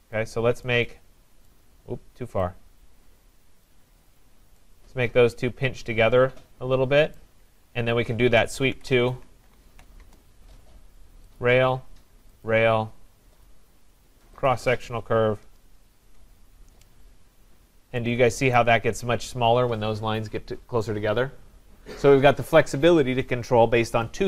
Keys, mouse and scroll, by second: 0.2 click, 1.5 right click, 3.6 click, 4.2 click, 7.1 right click, 8.1-10.1 typing, 11.4 click, 12.4 click, 13.4 click, 14.5 click, 15.4 Return, 16.0 Return, 17.3 middle click, 17.4 middle click, 17.5 scroll, 18.6 right click.